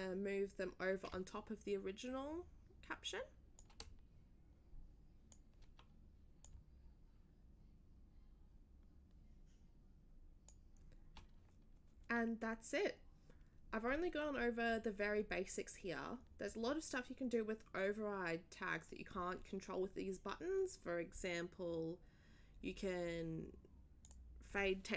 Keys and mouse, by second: 3.5-5.4 shift+drag, 5.5 shift+click, 6.4-10.5 shift+drag, 10.6 shift+click, 24.0 click.